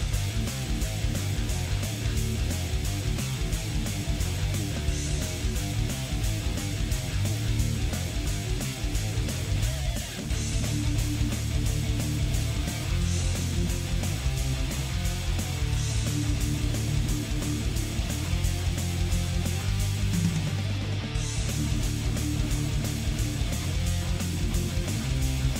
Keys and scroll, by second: 0.0 z, 2.1 z, 2.4 z, 4.5 z, 6.4 z, 8.3 z, 9.6 z, 10.5 z, 11.3 z, 13.5 z, 13.8 z, 14.5 z, 15.6 z.